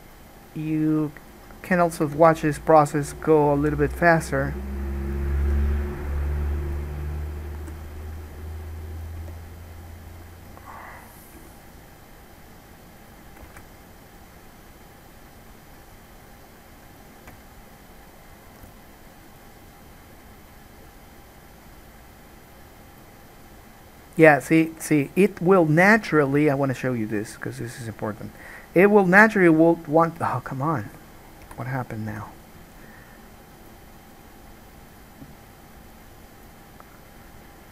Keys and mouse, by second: 2.4 ctrl+z, 2.9-5.3 drag, 3.8 g, 5.3 middle click, 5.4-6.9 drag, 5.6 g, 6.9-7.9 middle drag, 7.9-11.3 drag, 7.9 g, 9.4 g, 11.3 middle click, 11.5-13.2 drag, 11.5 g, 13.2-17.4 right drag, 13.9 alt+a, 17.4-27.3 shift+drag, 31.6 Escape, 32.3 n, 35.3-37.7 right drag.